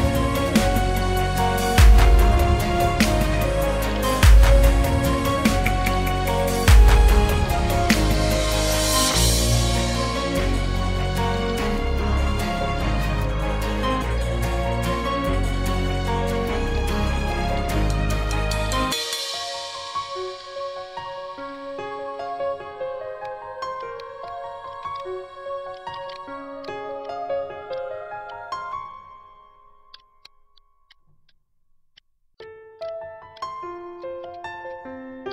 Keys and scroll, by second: 0.2 space, 2.5-4.2 typing, 5.4-8.4 typing, 9.5 space, 12.1 ctrl+g, 13.8 ctrl+;, 14.0 ctrl+', 14.7 ctrl+', 16.8 space, 17.3 space, 20.7 v, 24.1 v, 24.5 space, 25.1 space, 27.5 ctrl+c, 28.1 t, 28.5 ctrl+v, 28.9 Left, 29.4 shift+3, 35.1 ctrl+c.